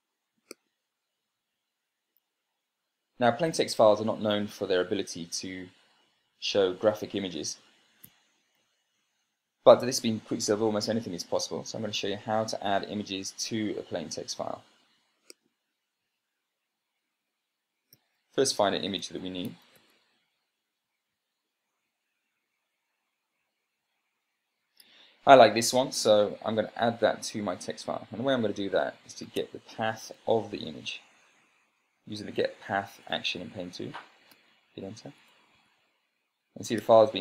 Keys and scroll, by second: 18.4 super+space, 19.0-20.7 typing, 21.5 Right, 24.0 Down, 29.7 Tab, 30.1 g, 30.5 p, 34.4 Return, 36.0 Tab.